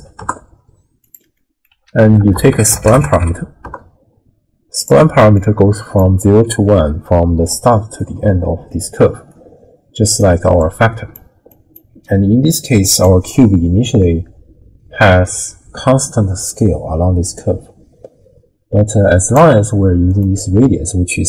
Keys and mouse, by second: 1.4 middle click, 1.8 ctrl+a, 5.4-6.0 drag, 6.7-7.1 middle drag, 7.5-11.9 d, 8.0 click, 10.1 click, 10.6 click, 11.5 click, 13.0-19.4 drag, 13.0 d, 20.1 click.